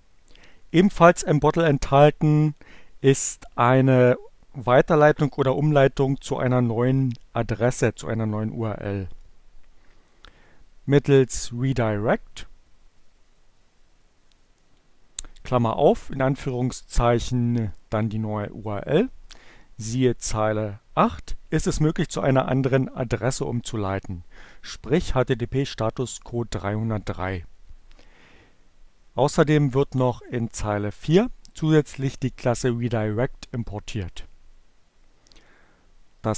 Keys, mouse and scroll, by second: 12.3-14.2 drag, 17.5-19.3 drag, 27.9-30.2 drag, 35.6 click.